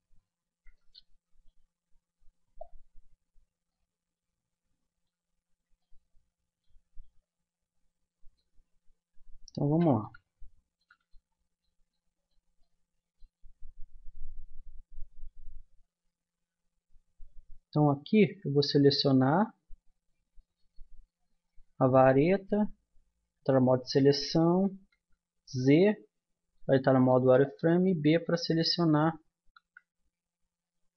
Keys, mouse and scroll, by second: 2.6 middle click, 2.7 middle click, 4.2 middle click, 4.4 middle click, 5.5-7.0 middle drag, 9.6 a, 12.0-20.4 middle drag, 18.3 Tab, 20.4-21.5 drag, 22.0 Tab, 24.9 z, 27.0 b, 29.6 z.